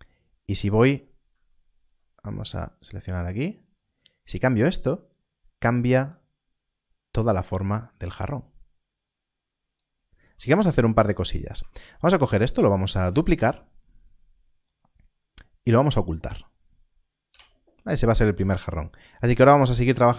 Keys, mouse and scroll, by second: 2.8 click, 11.5 Tab, 12.8 shift+d, 17.3 h, 18.2 click.